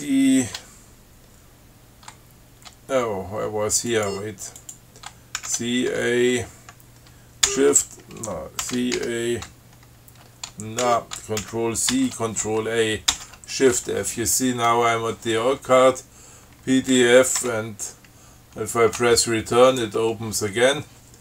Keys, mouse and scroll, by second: 0.2 ctrl+c, 4.2 click, 4.8 click, 5.7 ctrl+c, 6.2 ctrl+a, 7.7 shift+f, 8.9 ctrl+c, 9.2 ctrl+a, 11.1 ctrl+g, 11.7 ctrl+c, 12.2 ctrl+a, 12.7 ctrl+shift+a, 13.4 shift+f, 17.7 Return, 20.0 right click.